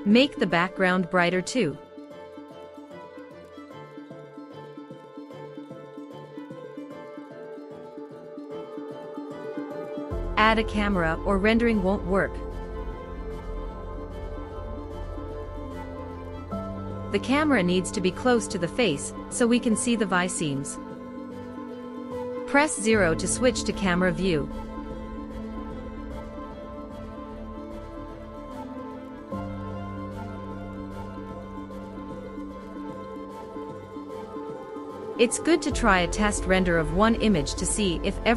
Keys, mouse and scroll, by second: 8.0 click, 10.1-12.5 drag, 14.4-15.1 drag, 16.3 g, 16.6 y, 17.7-18.2 drag, 18.2 g, 18.4 z, 23.7 KP_0, 26.6 g, 26.9 x, 28.4 g, 28.9 z, 29.1 z, 31.8 g, 32.1 z, 36.9-38.3 drag.